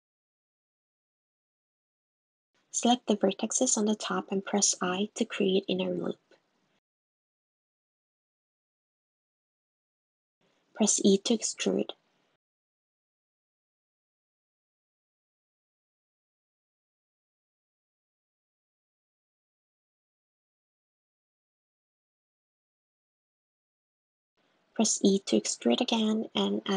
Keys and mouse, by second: 0.3 click, 1.5 Tab, 2.5 click, 2.5 click, 3.0 click, 10.8 e, 12.4 super+x, 12.7 super+z, 15.0 s, 22.4 e, 24.0 e, 24.9 s, 26.5 e.